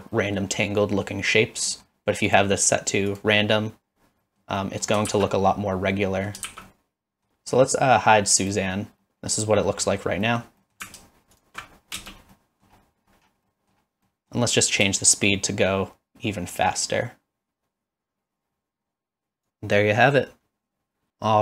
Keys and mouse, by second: 0.2 middle click, 0.8 middle click, 1.8 middle click, 2.2-3.2 drag, 4.2 middle drag, 4.6 middle drag, 5.1 shift+z, 5.3-6.3 middle drag, 6.6-7.3 middle drag, 7.3 shift+z, 8.4 click, 9.0 middle click, 9.9 middle click, 10.4 middle click, 11.3 alt+shift+click, 12.0 space, 12.4 middle click, 13.5 middle click, 14.1 middle click, 15.3-19.5 shift+drag, 20.8 shift+click.